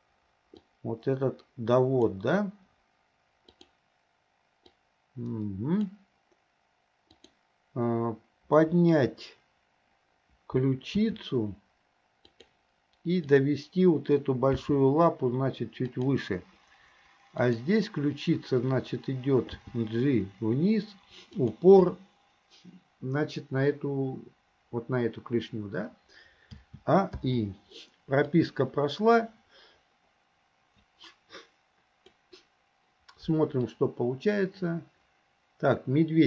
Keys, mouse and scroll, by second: 0.6-2.1 drag, 3.5 click, 4.8-5.9 drag, 7.1 click, 11.0 r, 13.3 click, 14.6 g, 17.4 click, 19.6 g, 26.6 a, 27.2 i, 28.4-32.2 drag, 33.7-36.2 drag.